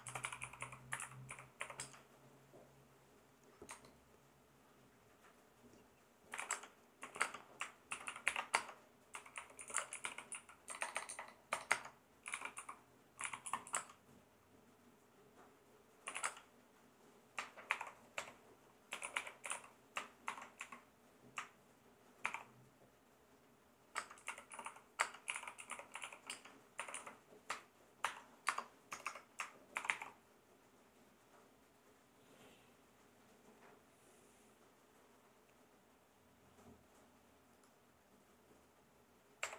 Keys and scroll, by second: 0.0-2.1 typing, 3.7 BackSpace, 6.3-14.2 typing, 15.8-16.6 typing, 18.1-20.6 typing, 22.3 shift+4, 23.9-28.4 typing, 28.9 Return, 29.7 shift+4, 39.4 \.